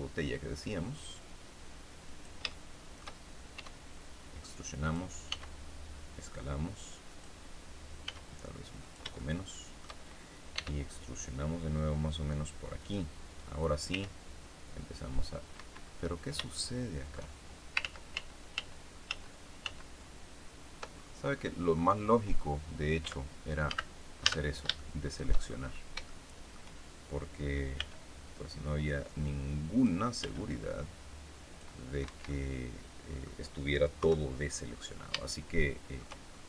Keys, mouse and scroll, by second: 2.0 click, 2.4 shift+middle click, 4.8 click, 5.2 s, 7.0 click, 8.0 s, 8.8 shift+click, 9.1 shift+middle click, 10.5 e, 12.7 click, 13.8 r, 15.5 Escape, 16.5 shift+click, 17.8 ctrl+z, 20.9-21.5 ctrl+scroll down 3, 21.7-22.1 scroll up 2, 22.2 scroll down 2, 23.0 a, 23.6 a, 24.7 shift+middle click, 25.7 scroll up 1, 26.0 shift+middle click, 27.7 b, 28.8-30.0 drag, 30.1 b, 30.4-31.7 drag, 32.0 Escape, 32.2 middle click, 32.3 scroll up 1, 33.9 KP_3, 34.6-34.9 scroll down 1, 35.2 shift+middle click, 36.2-36.4 shift+scroll up 1.